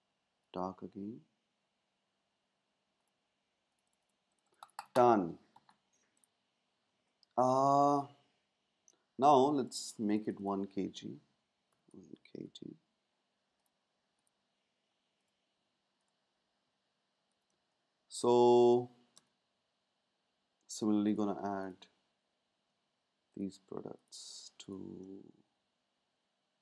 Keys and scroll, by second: 11.4-12.9 typing, 17.5 space.